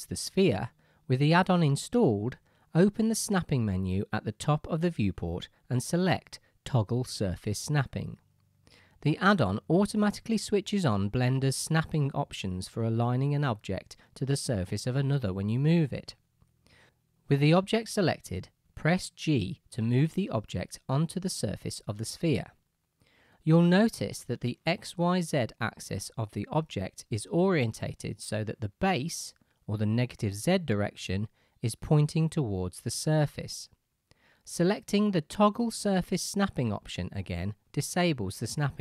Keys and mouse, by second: 6.3-24.9 middle drag, 19.7 g, 24.9 right click, 26.0 KP_Decimal, 26.1 right click, 26.3-26.9 right drag, 35.5-36.8 drag, 38.5-38.8 drag.